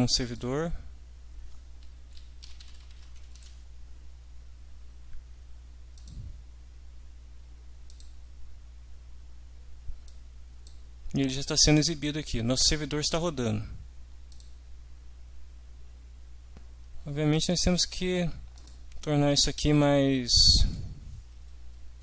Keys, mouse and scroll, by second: 0.2 click, 2.2-3.4 typing, 6.0 click, 7.9 click, 10.1 click, 14.3 click, 17.6 click, 18.6 click.